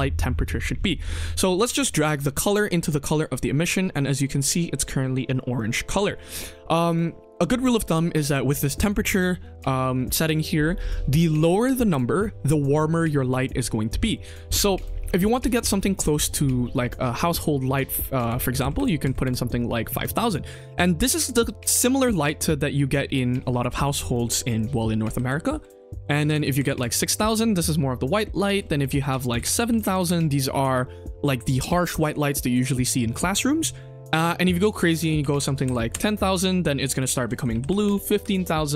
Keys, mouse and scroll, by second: 2.0-3.1 drag, 3.9-4.2 middle drag, 6.8-8.2 drag, 8.7-14.7 drag, 15.6 click, 16.0-19.2 drag, 18.7 KP_0, 20.2 scroll up 1, 20.5 scroll down 2, 24.0-26.6 drag, 25.6 KP_9, 26.0 BackSpace, 26.4 KP_0, 26.5 KP_0, 27.9-29.9 drag, 29.3 BackSpace, 29.6 KP_0, 29.8 KP_0, 30.8 scroll down 1, 31.0 middle drag, 34.5-35.9 drag, 35.1 KP_0, 35.6 KP_0, 36.9-38.1 drag, 37.6 KP_0, 37.8 KP_0.